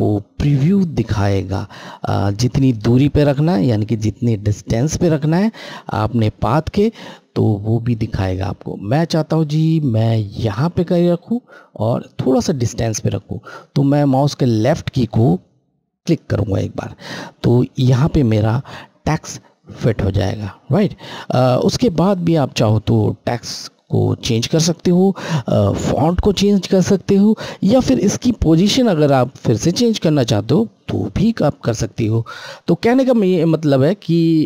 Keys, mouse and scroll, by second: 15.8 click, 15.9 Left.